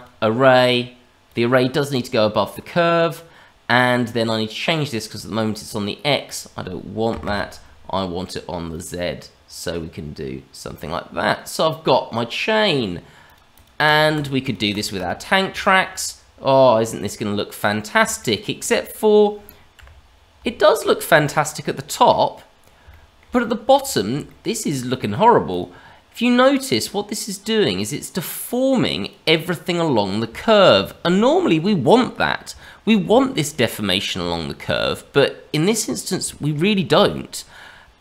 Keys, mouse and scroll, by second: 0.0 click, 1.2 click, 6.2 click, 8.6 click, 13.2 click, 13.5 click, 13.8 click, 14.1 click, 14.4 click, 14.6 click, 14.9 click, 15.6 shift+middle click, 16.9 click, 17.6-18.0 scroll down 2, 18.1 shift+middle click, 18.6-19.7 scroll up 2, 20.5 shift+middle click, 21.0-21.4 scroll up 2, 21.4 middle click, 22.9 middle click, 23.3 middle click, 23.8 shift+middle click, 24.2 middle click, 25.4 click, 28.9 click, 30.3 shift+middle click, 33.1 shift+middle click, 34.2 shift+middle click, 35.9 scroll down 1, 36.2 shift+middle click.